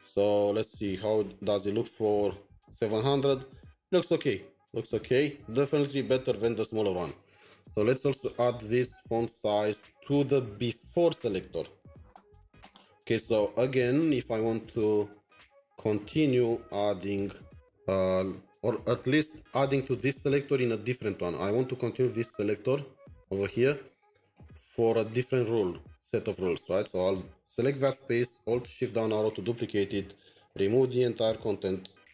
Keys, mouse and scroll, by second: 8.7 Down, 10.0 ctrl+c, 10.0 typing, 12.5 scroll down 2, 12.8 scroll up 1, 20.4 scroll up 1, 20.4 double click, 22.0 double click, 27.1 double click, 30.5 double click, 32.0 BackSpace.